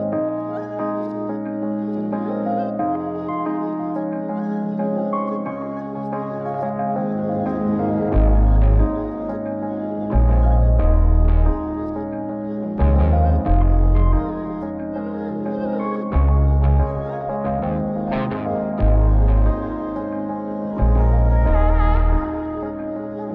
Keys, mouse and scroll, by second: 2.3-4.8 right drag, 5.8 q, 7.3 q, 9.3-15.2 drag, 15.8 q, 17.2 q, 18.2 q, 19.1 q, 21.5-23.3 drag.